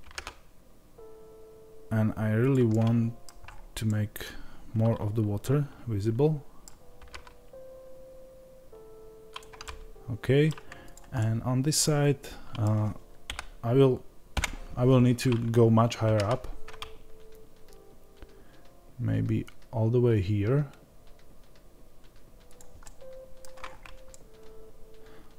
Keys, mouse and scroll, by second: 2.6-10.7 middle drag, 3.3-3.7 scroll up 2, 6.9 g, 10.7 click, 11.0-25.3 middle drag, 13.1 KP_7, 23.5 scroll up 1.